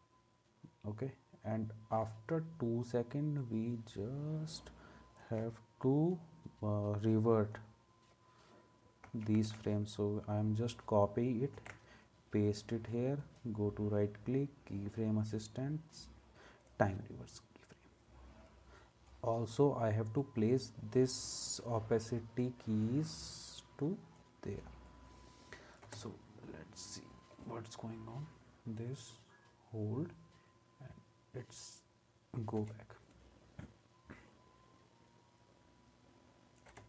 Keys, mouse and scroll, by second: 9.0 ctrl+c, 11.5 ctrl+v, 25.8 space, 32.6 space, 36.7 space.